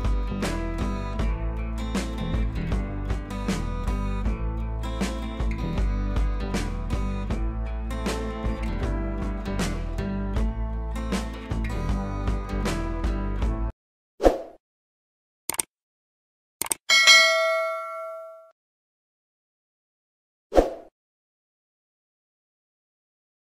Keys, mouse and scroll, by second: 0.2 [, 0.3 click, 2.1 click, 2.3 scroll down 1, 2.8 click, 3.0-3.4 scroll down 1, 4.0 scroll up 1, 5.9-6.9 scroll down 1, 6.9-7.5 scroll up 1, 7.5 click, 8.1 b, 8.6 click.